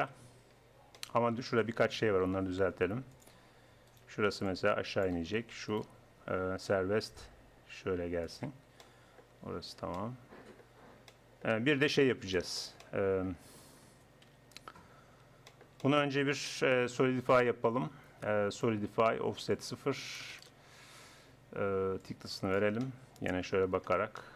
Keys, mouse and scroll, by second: 0.0 KP_1, 2.9 middle click, 3.9-6.4 middle drag, 6.8 right click, 6.8 g, 11.8 Tab, 14.3 KP_1, 17.5-19.3 drag, 19.3 middle click, 19.5-23.9 drag.